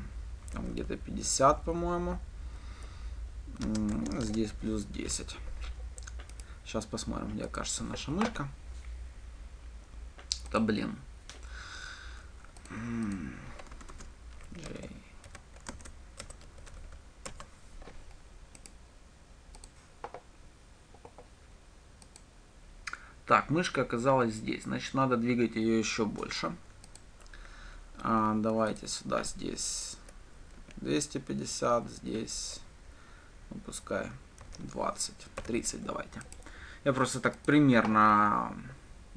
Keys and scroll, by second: 7.8 ctrl+shift+F10, 14.4 Tab, 16.6 Return, 20.0 ctrl+shift+F10, 37.9 ctrl+shift+F10.